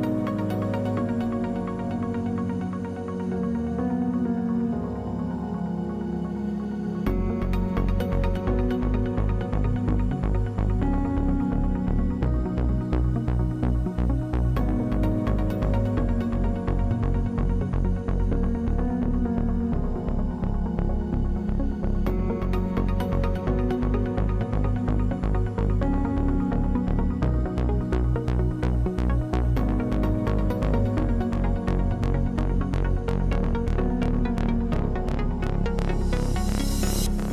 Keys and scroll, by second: 13.2 1, 30.5 w, 34.6 3.